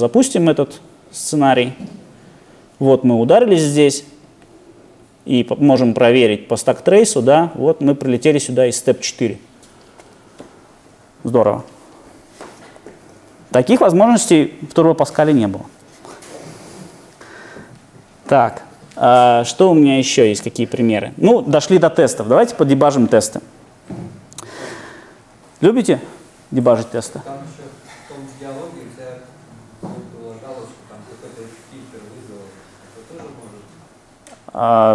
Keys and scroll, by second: 17.9 super+F2.